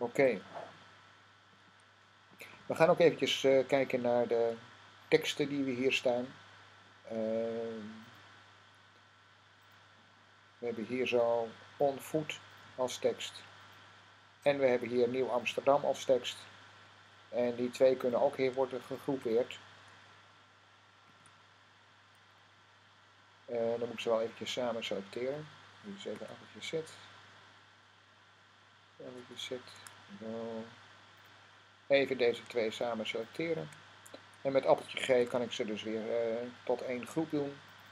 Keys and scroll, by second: 20.9 g, 26.0 z, 29.4 z, 32.3 super+z, 34.9 g.